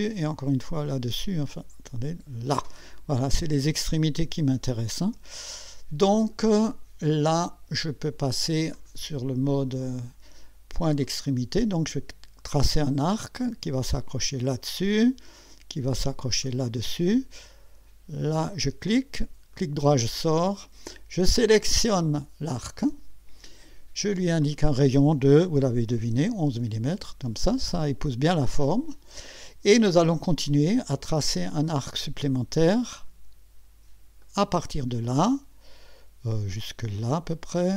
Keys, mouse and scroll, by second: 0.6 click, 1.8 click, 5.8 scroll up 2, 8.7 click, 11.0 click, 14.2 click, 16.4 click, 18.8 click, 19.5 right click, 21.9 click, 24.4 click, 25.9 1, 26.9 click, 31.3 click, 34.2 click, 36.5 click.